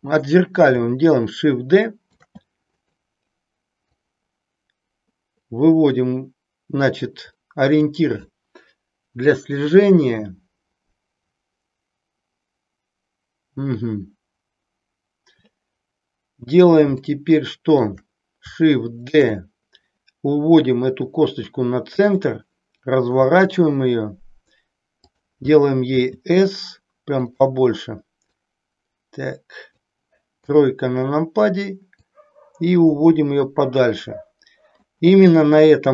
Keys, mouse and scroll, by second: 2.0 shift+d, 2.8 click, 3.8-7.8 drag, 17.0 shift+middle click, 19.0 shift+d, 22.1 click, 23.1 r, 25.9 s, 28.5-29.9 drag, 30.4 KP_3, 32.0-35.0 drag.